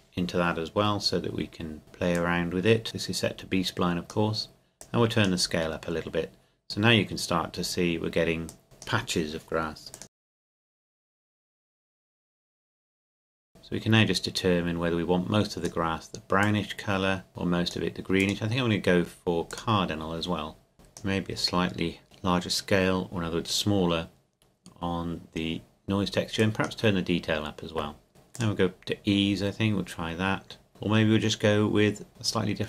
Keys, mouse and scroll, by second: 6.8-8.6 scroll up 3, 8.6-12.9 drag, 13.5 click, 26.4 click.